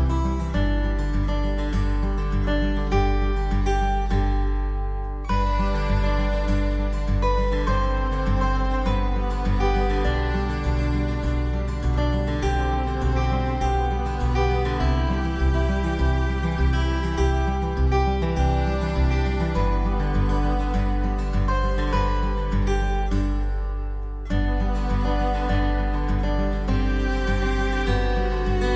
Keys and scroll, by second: 3.4 space.